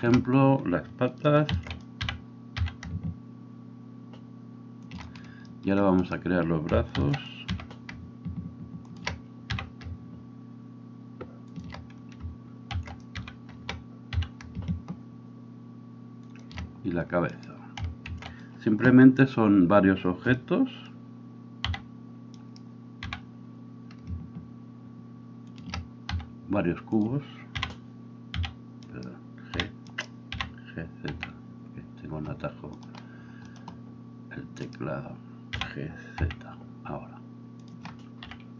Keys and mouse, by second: 1.8 shift+d, 2.0 g, 7.0 shift+d, 7.6 r, 9.5 g, 12.8 shift+d, 13.1 g, 18.1 shift+d, 21.7 d, 23.0 g, 26.1 s, 27.6 g, 29.5 f, 30.4 g, 31.1 z, 33.9-38.3 drag, 34.7 middle click, 34.7 right click, 35.6 g, 38.3-38.5 middle drag, 38.3 KP_3.